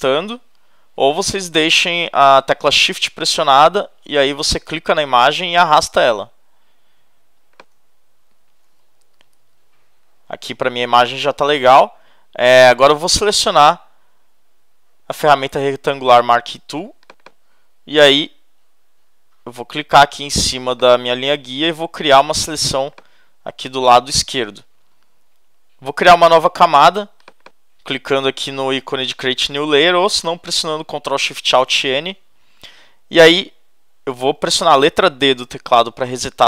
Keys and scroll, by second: 9.0 shift+Right.